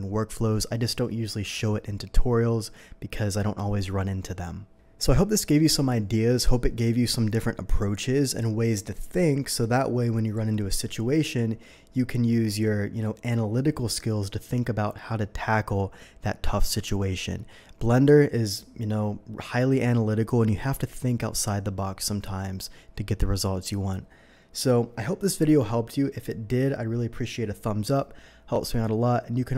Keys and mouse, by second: 29.5 typing, 29.5 click.